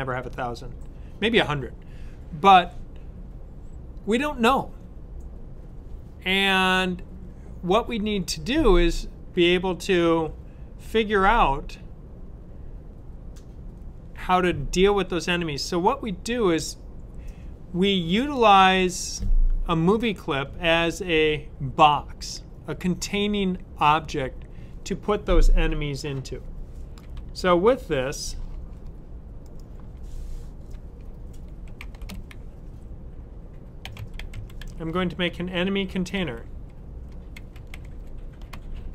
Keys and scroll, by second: 31.5 v, 33.6-38.9 typing.